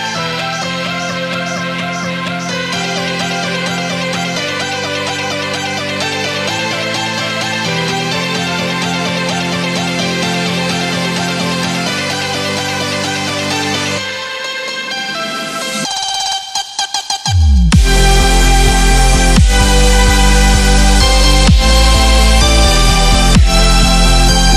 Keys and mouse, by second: 3.2 Right, 3.4 Down, 4.4-9.1 drag, 10.9 click, 11.4 Left, 11.8 ctrl+-, 15.0 ctrl+-, 16.0-21.8 drag, 22.1 space, 23.1-24.5 shift+drag, 24.5 space.